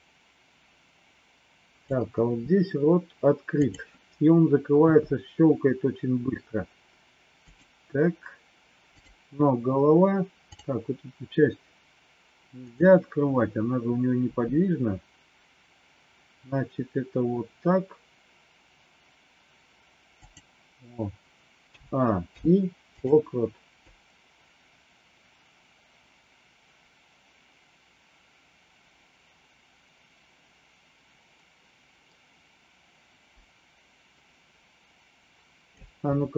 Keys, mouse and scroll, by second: 4.9 r, 8.8 click, 10.6 click, 14.2 r, 21.6 a, 22.3 i, 23.9-35.7 drag.